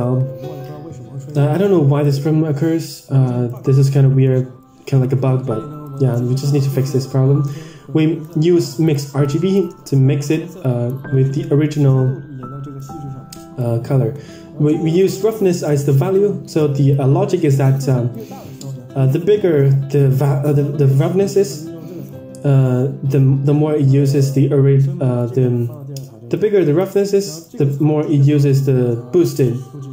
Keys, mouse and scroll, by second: 2.0 click, 3.4 click, 4.1 Tab, 5.0 middle click, 5.7 drag, 6.8 shift+a, 9.1-9.5 drag, 10.5 click, 12.7-13.6 drag, 14.9-15.5 drag, 15.7 middle click, 16.5 click, 17.0 middle click, 18.0 click, 18.3 middle drag, 21.5-22.0 drag, 25.1 click, 26.3 click, 27.3 click, 28.5 shift+d.